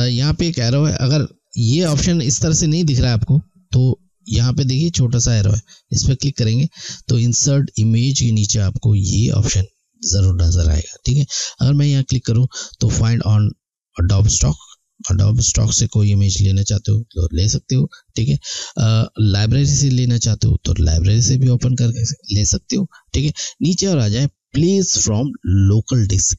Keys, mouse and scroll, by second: 3.7 click, 6.4 click, 11.7 click.